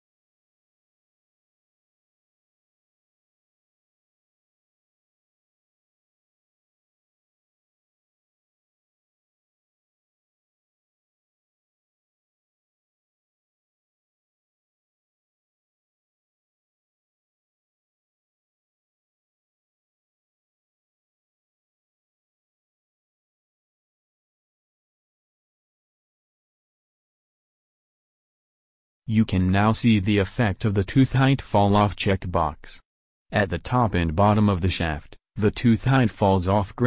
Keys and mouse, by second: 0.6 middle click, 1.1 middle click, 1.8 middle click, 1.9-3.0 middle drag, 3.4-4.4 middle drag, 4.4 c, 7.4 click, 7.6-8.0 middle drag, 8.2-10.0 middle drag, 10.6 c, 13.6 middle click, 13.8 middle click, 15.9 c, 19.6 c, 24.0 w, 36.0 KP_1.